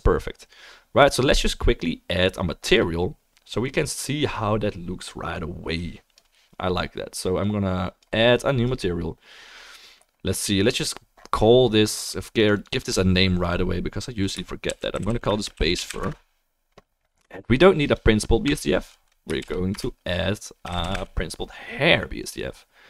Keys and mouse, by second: 6.2-10.7 drag, 6.2-11.7 middle drag, 6.2-22.8 right drag, 12.6-17.9 drag, 12.6-17.9 middle drag, 18.5 Delete, 19.4 shift+a.